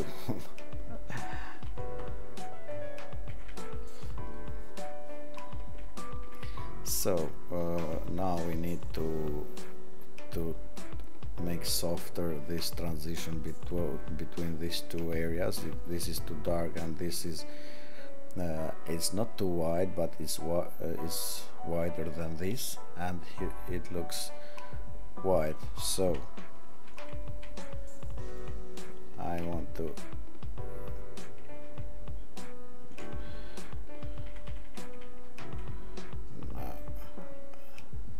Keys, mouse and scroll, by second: 26.9 ctrl+z, 27.4 ctrl+z, 28.3 ctrl+z, 28.8 ctrl+z, 29.4 ctrl+z, 29.9 ctrl+z, 31.2 ctrl+z, 31.6 ctrl+z.